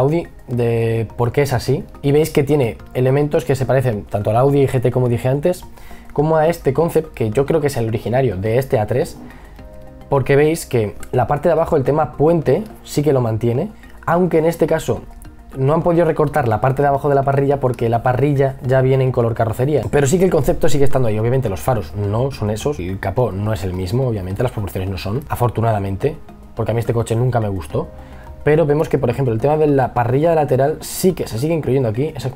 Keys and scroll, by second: 0.6 b, 1.9 space, 17.1 e, 18.9 b.